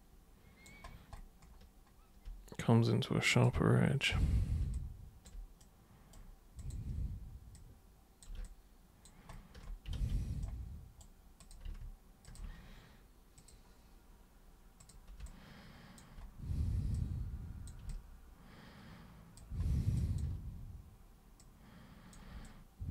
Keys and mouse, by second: 3.3 super+click, 4.8-5.3 alt+super+drag, 5.6 super+right click, 6.6 super+click, 7.6 super+click, 8.5 alt+super+click, 10.0 ctrl+super+z, 10.4 super+right click, 11.4 super+click, 12.3 ctrl+shift+super+click, 13.4 super+click, 14.8 super+click, 15.3 alt+super+click, 17.0 super+click, 17.9-19.4 alt+super+drag, 20.0 alt+super+click, 21.4 super+click, 22.5 alt+super+click.